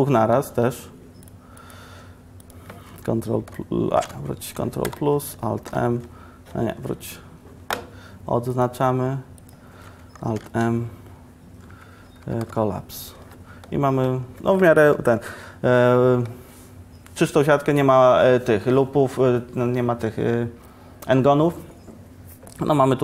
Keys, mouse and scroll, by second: 5.0 ctrl+Return, 5.0 Escape, 5.0 KP_Decimal, 5.8 alt+m, 10.4 alt+m, 12.3 Down.